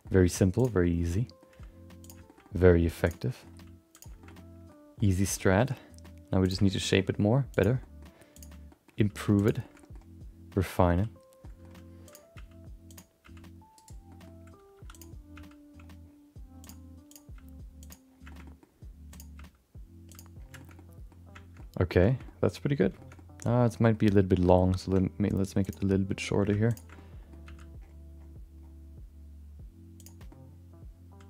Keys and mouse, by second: 0.0 middle click, 0.5 click, 0.8 middle click, 1.5 g, 2.2 shift+middle click, 2.4 middle click, 3.0 click, 3.2 middle click, 3.5 g, 4.2 middle click, 4.9 middle click, 5.5 middle click, 5.7 middle click, 6.4 click, 6.6 shift+middle click, 6.8 middle click, 7.0 g, 7.8 middle click, 8.3 click, 8.7 middle click, 8.9 g, 9.6 shift+middle click, 9.8 middle click, 10.5 middle click, 11.4 middle click, 12.0 click, 12.3 g, 13.2 g, 14.1 middle click, 14.7 2, 14.9 click, 15.3 g, 17.1 click, 17.3 g, 18.3 shift+middle click, 18.4 middle click, 19.1 click, 19.3 g, 20.5 shift+middle click, 20.7 middle click, 21.5 middle click, 22.0 middle click, 22.2 middle click, 23.0 middle click, 23.1 middle click, 23.6 middle click, 24.3 middle click, 24.8 3, 25.6 click, 25.9 middle click, 26.7 ctrl+shift+click, 26.9 middle click, 27.4 g, 30.3-31.2 middle drag.